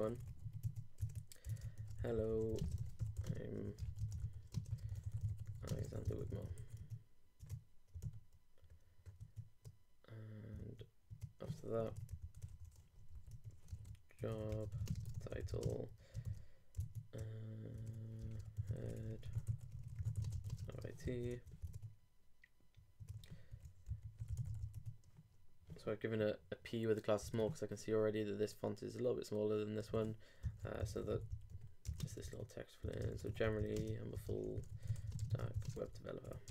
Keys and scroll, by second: 1.0 super+Tab, 1.6 shift+super+Tab, 1.8 shift+super+h, 2.0-6.4 typing, 6.5 super+e, 6.6 super+s, 6.8 super+Tab, 8.0 super+r, 9.2 super+Tab, 10.6 super+Tab, 12.2 super+Right, 12.5 super+Return, 13.5-16.2 typing, 16.7 shift+super+h, 16.8 shift+super+Tab, 17.4 super+Tab, 18.2 shift+super+Tab, 18.3 shift+super+h, 18.6 shift+e, 20.4-21.2 typing, 21.3 super+Return, 21.7 super+Tab, 23.0 super+Tab, 23.5 super+p, 27.3 super+Tab, 29.9 super+Tab, 30.4 shift+super+Tab, 30.5 shift+super+g, 30.6 shift+e, 31.8 shift+y, 32.0 shift+space, 32.3 shift+super+Tab, 32.8 super+Tab, 33.1 shift+super+f, 33.3-36.5 typing.